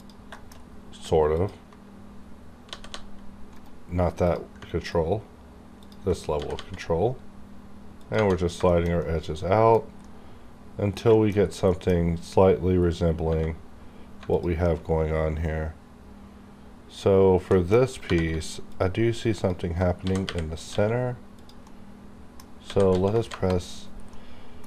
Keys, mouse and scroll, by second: 0.0 click, 0.3 shift+middle click, 0.4 shift+scroll down 1, 1.4 ctrl+click, 2.7 g, 2.9 g, 3.5 right click, 4.2 click, 4.8 ctrl+click, 6.4 g, 6.5 g, 8.0 click, 8.4 scroll down 1, 8.7-11.1 shift+middle drag, 11.1 shift+middle click, 11.4 scroll down 1, 11.6 middle click, 13.4-14.2 scroll up 1, 14.3 alt+click, 15.5 scroll up 1, 17.5 shift+middle click, 18.1 3, 18.7 alt+click, 19.9 g, 21.4 click, 21.7 middle click, 22.6 s, 23.1 KP_0, 23.3 KP_Enter, 24.1 middle click.